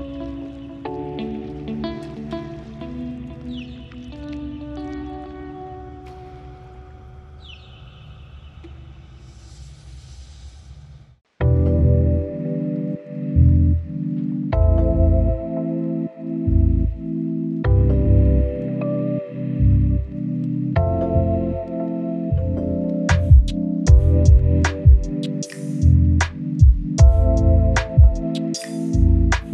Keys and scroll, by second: 4.3-8.9 typing, 4.5 Return, 5.5 Return, 6.2 Return, 7.0 alt+c, 10.3-12.0 typing, 19.8 ctrl+alt+z, 22.9 ctrl+z, 28.2 ctrl+alt+shift+z.